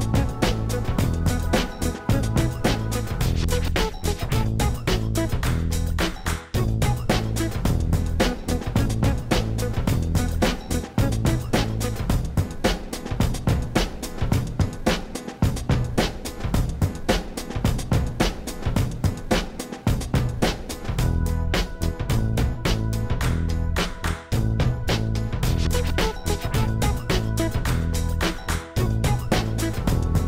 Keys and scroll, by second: 2.2 x, 5.1 shift+a, 7.3 Tab, 8.8 s, 10.2 shift+z, 13.0 s, 14.9 shift+z, 15.9 s, 16.2 shift+z, 20.2 s, 26.2 s, 27.5 shift+z.